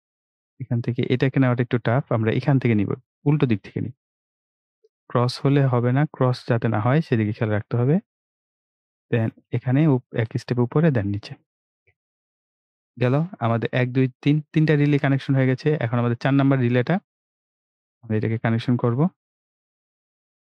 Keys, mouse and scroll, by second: 3.2 click, 6.5 click, 9.4 click, 14.8-15.1 scroll down 1, 15.7 scroll up 1, 15.9-16.2 scroll down 1, 16.4-16.8 ctrl+scroll up 1, 17.0 ctrl+scroll up 1, 17.7 click.